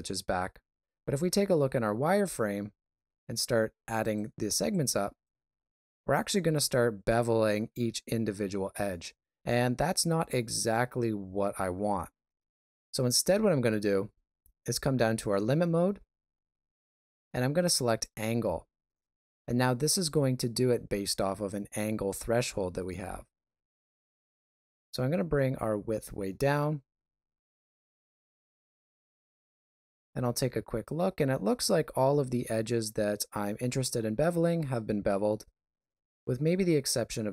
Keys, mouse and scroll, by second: 1.3 shift+z, 2.0 ctrl+middle click, 4.0 click, 4.7 click, 5.6 click, 6.4 ctrl+middle click, 9.5 ctrl+middle click, 12.4 shift+z, 17.8 click, 22.1 shift+z, 24.3 click, 29.8 middle click.